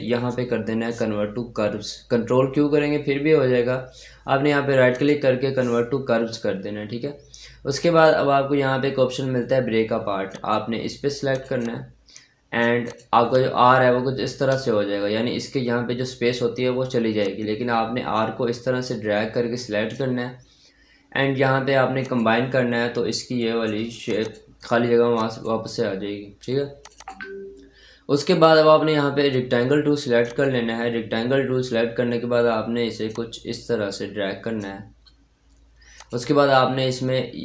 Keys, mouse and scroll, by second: 4.8 click, 10.1 click, 10.2-13.2 drag, 13.2-14.3 scroll up 1, 14.3-16.1 scroll down 1, 17.1-21.9 drag, 22.7 scroll up 1, 23.5-23.9 scroll up 1, 23.9 click, 30.1 click, 31.1-32.9 scroll up 1, 32.9-35.8 drag.